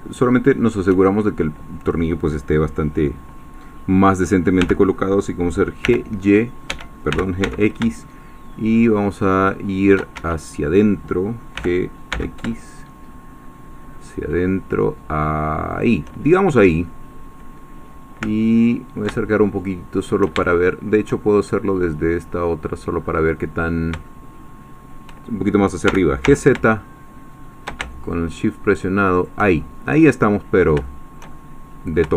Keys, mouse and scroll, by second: 4.6 g, 5.8 y, 6.7 Escape, 7.1 g, 7.4 x, 10.2 Escape, 11.6 g, 12.1 x, 15.7 shift+click, 16.3 shift+scroll down 2, 16.8 middle click, 18.4 ctrl+middle click, 19.2-20.3 ctrl+shift+middle drag, 20.5-23.0 shift+middle drag, 23.0-23.5 scroll up 1, 23.7 scroll up 2, 24.0-25.1 shift+middle drag, 25.9 g, 26.2 z, 29.1 shift+click, 29.5-30.8 shift+scroll down 3, 30.8-32.1 shift+middle drag.